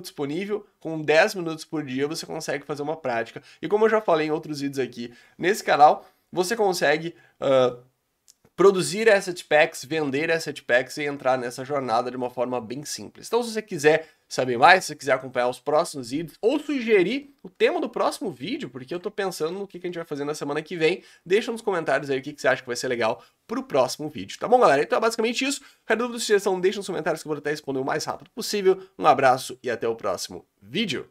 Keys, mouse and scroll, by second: 17.2-31.1 middle drag.